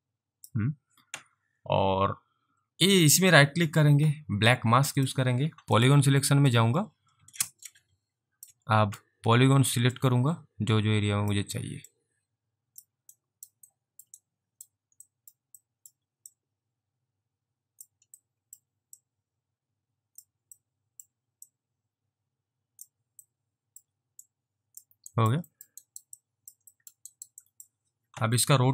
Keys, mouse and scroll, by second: 3.2 right click, 4.9 right click, 5.0 click, 5.8 click, 6.5 alt+click, 10.1 click, 12.0 click, 13.3 alt+right click, 13.8 alt+middle click, 14.2 alt+right click, 15.2 alt+middle click, 15.7 alt+middle click, 16.4 click, 18.3 alt+middle click, 19.1 click, 20.7 alt+middle click, 21.6 click, 23.3 alt+middle click, 24.3 click, 25.2 alt+right click, 25.6 alt+middle click, 25.9 alt+right click, 25.9 alt+double right click, 26.2 alt+click, 26.9 alt+middle click, 27.2 alt+right click, 27.5 alt+click.